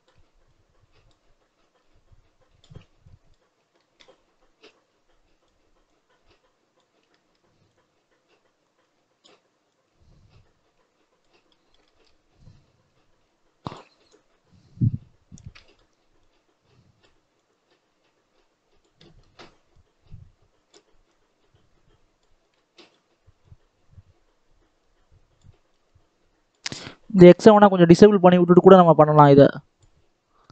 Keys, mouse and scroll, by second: 3.7 shift+middle click, 4.6-7.0 drag, 7.0 shift+middle click, 7.6-11.4 drag, 11.4 middle click, 12.2-15.5 drag, 15.5 middle click, 16.1-18.9 drag, 18.9 middle click, 19.6-22.3 drag, 22.3 scroll down 1, 22.5 shift+middle click, 22.7-23.3 scroll up 1, 23.3-27.2 drag, 27.9-30.5 drag.